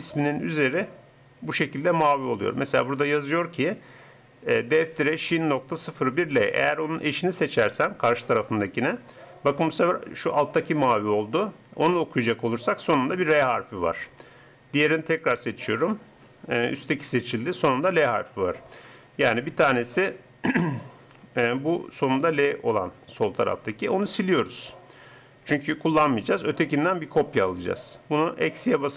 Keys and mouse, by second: 15.1-16.9 drag.